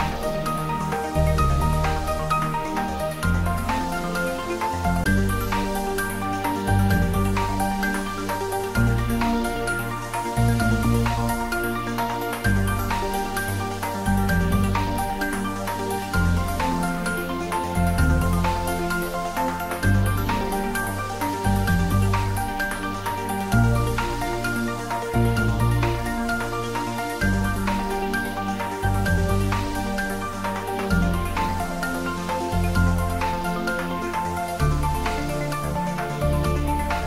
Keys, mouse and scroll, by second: 0.4-0.8 scroll up 1, 3.4-8.7 middle drag, 9.0-9.9 scroll down 1, 9.9 click, 10.3-10.7 scroll down 1, 10.7-11.3 middle click, 11.2-11.9 scroll up 1, 11.9-13.4 middle drag, 26.2 click, 28.6 r, 31.1 click, 31.9 s, 32.2 x, 34.4 click, 36.4 r.